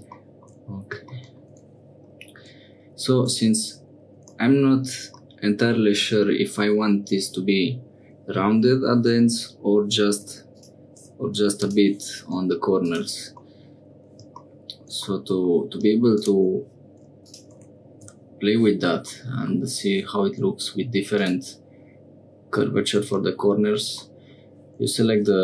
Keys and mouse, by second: 3.2 Tab, 4.2 Tab, 5.2 click, 10.1 2, 10.5 click, 13.4 middle click, 15.1 middle click, 17.2-18.5 drag, 19.1 middle click, 21.1 click, 24.1 middle click.